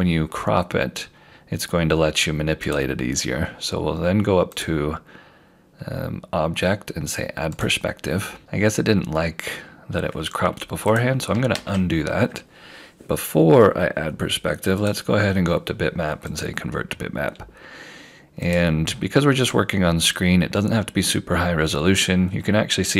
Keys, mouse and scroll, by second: 2.7 click, 10.9 click, 11.5 ctrl+z, 14.9 click.